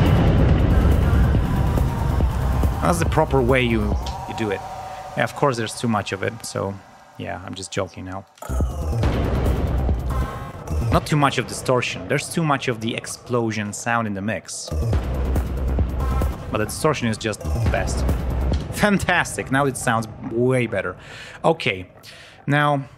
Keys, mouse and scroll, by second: 4.0 space, 5.7 ctrl+alt+p, 8.4 space, 9.9 click, 10.2 space, 10.4 click, 14.6 space, 15.3 click, 16.3 space, 16.9 ctrl+scroll down 2, 17.3 ctrl+space, 18.2 ctrl+scroll up 2, 18.5 ctrl+space, 18.8-19.5 ctrl+scroll down 4, 19.9 ctrl+scroll up 2, 20.2 ctrl+scroll down 2, 22.3 ctrl+scroll down 2.